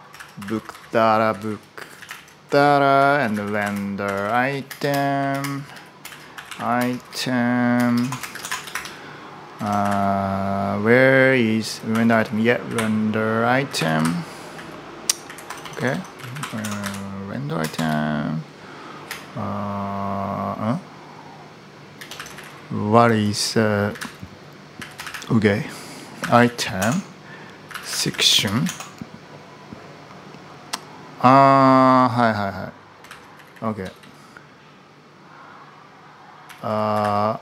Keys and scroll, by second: 0.0-10.2 typing, 11.2-17.5 typing, 21.9-28.8 typing, 32.8 Escape, 32.9-34.3 typing, 36.0-37.4 typing.